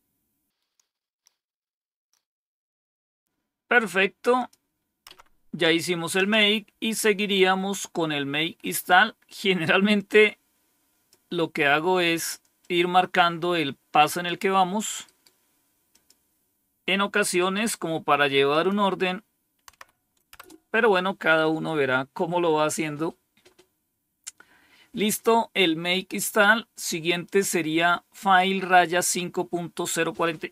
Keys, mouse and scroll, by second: 4.3 click, 5.0 Up, 6.1 Down, 9.9-11.0 drag, 12.5-14.2 drag, 15.0 right click, 15.8 click, 17.3 right click, 18.4 click, 19.6 Tab, 20.3 Return, 27.1 click, 29.6 click.